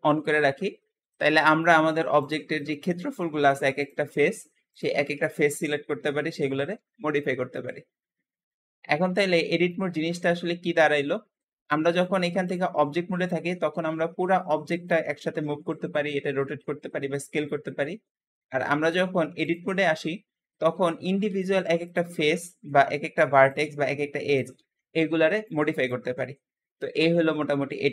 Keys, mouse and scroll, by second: 1.0-2.1 shift+middle drag, 2.1 shift+click, 2.4 shift+middle click, 2.8-3.1 scroll up 2, 3.1 shift+middle click, 3.7 shift+click, 4.0 shift+middle click, 4.6 shift+click, 4.9 shift+middle click, 5.8 g, 5.8 g, 7.9-8.4 scroll down 3, 8.5-9.6 scroll up 3, 9.6 shift+middle click, 10.1-10.7 scroll down 2, 10.7-11.8 shift+middle drag, 11.8-12.9 shift+drag, 12.9-13.4 scroll down 1, 13.4 g, 15.1 r, 15.2 r, 16.3 s, 16.5 s, 17.2 scroll up 2, 18.7-20.7 drag, 20.6 1, 20.7 1, 21.7 click, 22.2 g, 22.3 g, 23.3 click, 23.6 g, 24.1 click, 24.5 g, 24.6 g, 25.6 click, 26.0 g.